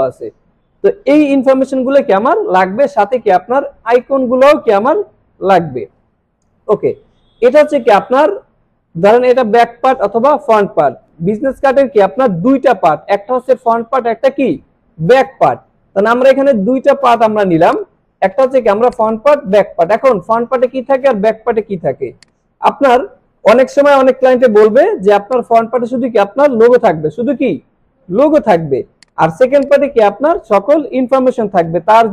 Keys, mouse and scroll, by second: 15.6 click, 16.8 alt+scroll down 1, 17.1 click, 18.4 click, 20.2 click, 22.2 click, 25.4-26.6 drag, 29.0-30.2 drag.